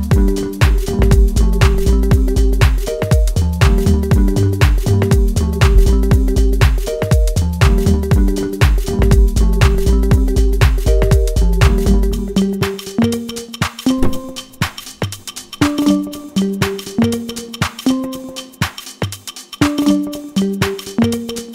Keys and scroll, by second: 3.3 ctrl+space, 3.9 F2, 8.5 0, 8.6 ., 8.8 1, 9.1 Return.